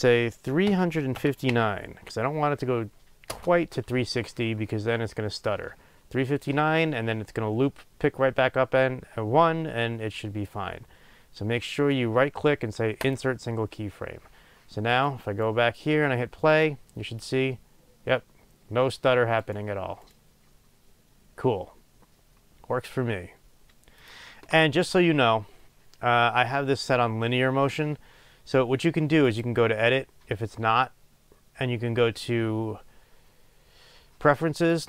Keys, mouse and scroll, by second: 3.3-13.1 drag, 3.4 Return, 13.1-15.2 right drag, 15.4-16.5 right drag, 16.5 click, 19.7 right click, 20.0 right click, 24.0 click.